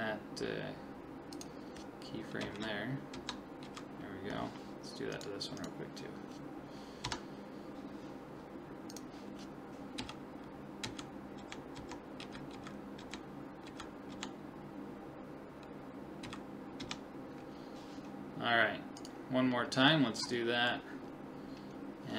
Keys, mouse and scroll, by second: 1.3 click, 2.4 Right, 3.2 Left, 3.7 Right, 5.1-7.5 right drag, 7.1 Left, 8.9 click, 10.0 Right, 10.9 Right, 11.4 Left, 11.8 Left, 12.2 Right, 12.5 Right, 13.0 Left, 13.7 Right, 14.1 Left, 16.2 Right, 16.8 Left, 19.0-22.0 right drag, 19.6 middle click, 22.0 middle click.